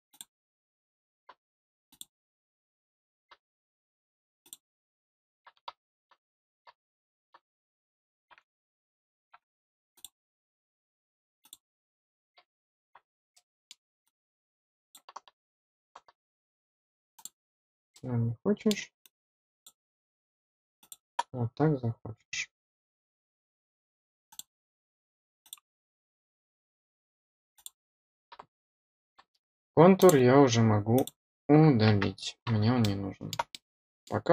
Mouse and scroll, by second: 0.0 click, 1.8 click, 4.3 click, 9.9 click, 11.3 click, 13.3 middle click, 14.0 click, 17.1 click, 17.6 scroll down 1, 17.8-18.6 middle drag, 18.9-19.6 drag, 20.7 click, 24.2 click, 25.3 click, 27.5 click, 29.9 click, 30.9 click, 32.2 middle click, 32.7-33.2 middle drag, 33.4-34.0 middle drag.